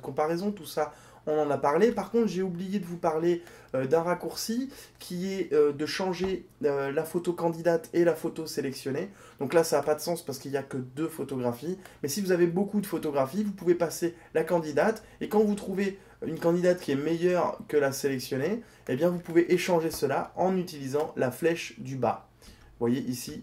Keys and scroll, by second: 6.2 Down.